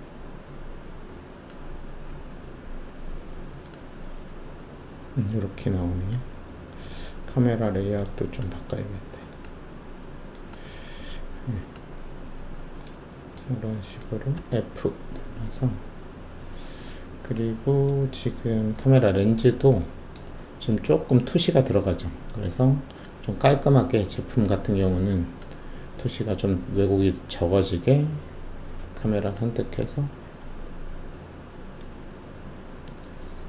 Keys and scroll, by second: 14.3 alt+f.